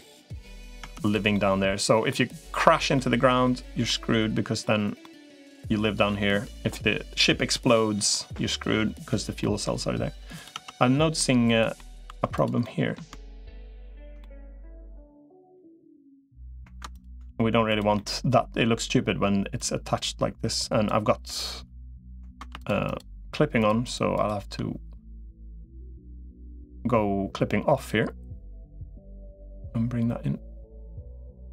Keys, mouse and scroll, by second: 0.6 Tab, 1.1 middle click, 2.7 middle click, 3.6 middle click, 4.8 middle click, 7.5 middle click, 9.2 middle click, 10.4 Tab, 11.0 middle click, 12.0 2, 12.4 middle click, 14.0 middle click, 15.3 middle click, 17.7 middle click, 19.4-20.8 drag, 23.4 shift+click, 24.0 shift+click, 28.6 click, 29.6-31.5 drag.